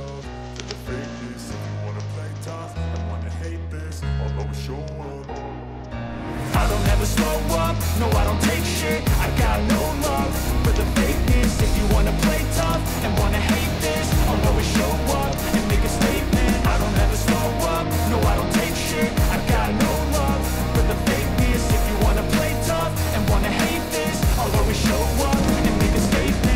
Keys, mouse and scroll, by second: 11.2 click, 12.7-13.9 drag, 24.2-25.3 drag, 26.0-26.5 drag.